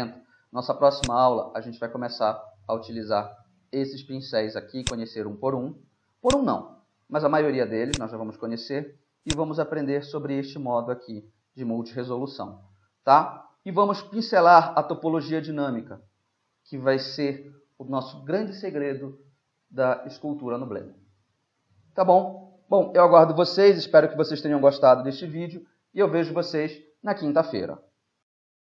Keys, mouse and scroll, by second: 8.0 click, 8.2 click, 9.3-11.3 drag, 12.2-22.1 middle drag, 23.6-24.9 middle drag.